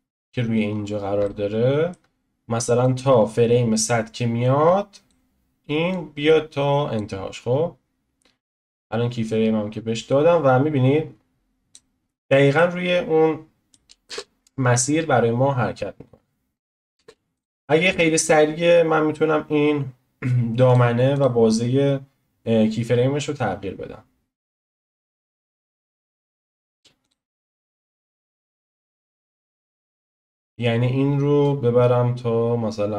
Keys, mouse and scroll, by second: 0.7-1.2 scroll down 5, 1.1 click, 1.2-2.8 shift+middle drag, 1.4-14.0 drag, 8.5-9.3 scroll down 1, 12.2-12.5 scroll down 1, 12.5-14.0 middle drag, 14.0 space, 16.9 space, 17.4 click, 21.2 click, 27.1 click, 30.0-32.9 drag.